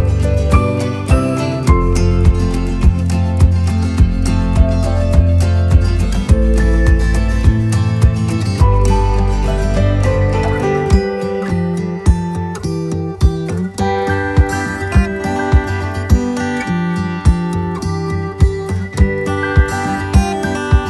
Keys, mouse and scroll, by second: 5.7 click, 16.9 click.